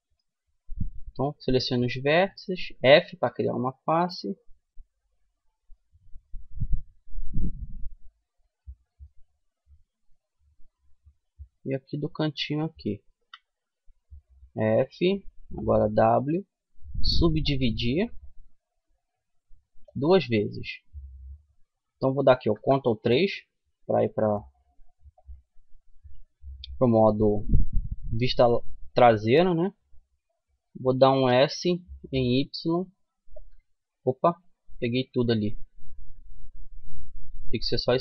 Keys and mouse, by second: 1.4 f, 2.4-3.4 middle drag, 4.8 middle click, 5.3-10.0 middle drag, 10.0-11.0 drag, 12.4-17.1 drag, 13.5 f, 14.2-17.1 middle drag, 14.4-17.1 right drag, 15.0 w, 19.2-20.8 drag, 21.8 ctrl+KP_3, 26.0-29.9 middle drag, 29.9 s, 33.3-34.4 middle drag, 34.4 ctrl+z, 37.6-38.0 drag.